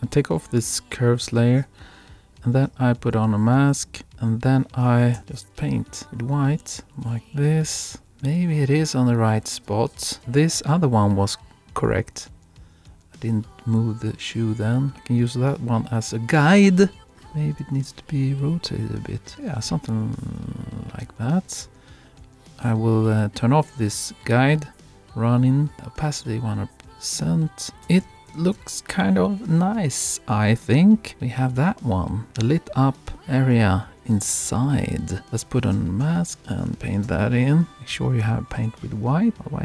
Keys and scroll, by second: 16.8 super+Right, 17.1 super+Down, 19.3 super+Down, 28.1 super+-.